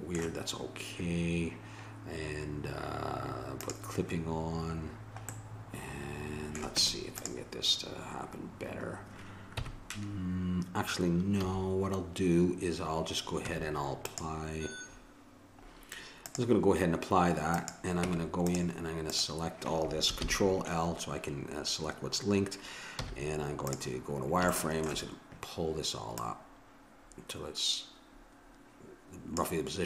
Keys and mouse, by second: 3.6-5.4 drag, 6.7 Tab, 9.5 KP_1, 11.4 a, 13.5 Tab, 16.2-18.0 drag, 18.0 Tab, 20.2 ctrl+l, 23.0 z, 24.1 middle click, 26.2-27.8 drag.